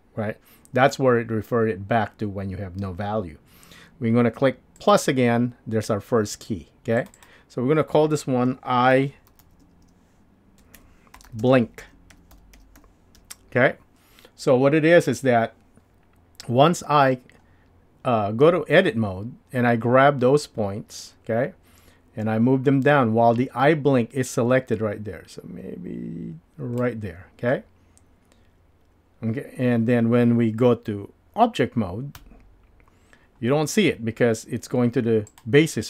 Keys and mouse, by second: 18.4 Tab, 21.1 click, 21.3-26.8 drag, 32.2 Tab, 35.3 click.